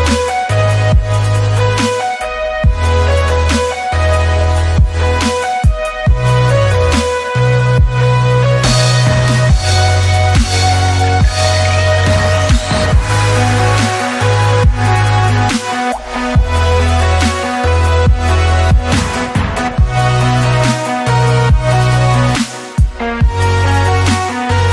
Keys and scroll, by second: 1.8 shift+super+s, 4.4 alt+Tab, 5.0 Tab, 5.3 ctrl+v, 5.7 space, 7.8 Escape, 11.0 Down, 13.0 space, 14.9 KP_3, 14.9 Return, 16.2 r, 17.0 Escape, 21.4 Escape, 24.3 shift+f.